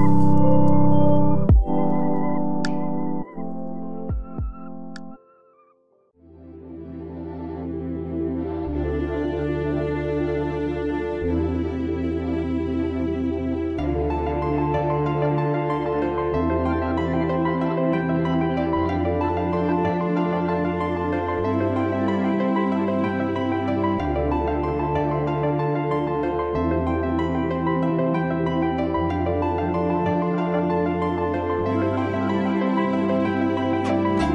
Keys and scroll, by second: 26.5 ctrl+j.